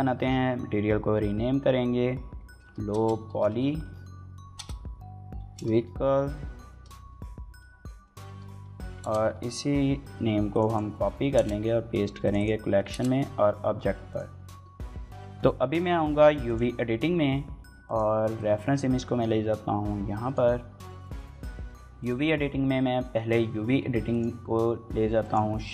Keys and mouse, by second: 8.6 ctrl+c, 10.5-11.5 ctrl+drag, 12.2-13.4 ctrl+drag, 13.9-25.7 drag.